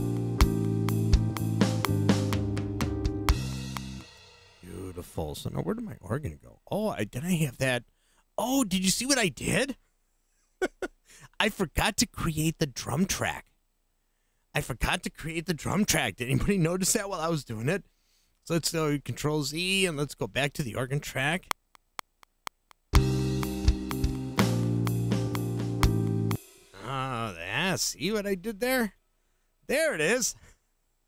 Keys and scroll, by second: 4.1 space, 18.4 super+z, 21.4 space, 26.3 space, 28.2 super+z.